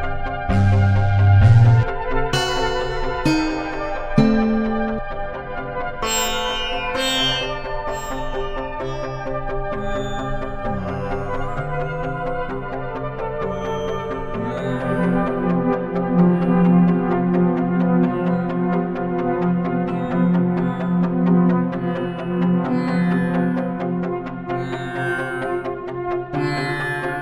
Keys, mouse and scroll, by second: 0.0 click, 6.6-8.4 drag, 8.9-10.0 drag, 10.5-16.4 drag, 16.8-18.3 drag, 19.0 click, 19.7 click, 20.7 click, 21.2 click, 23.4 click, 24.2-26.0 drag.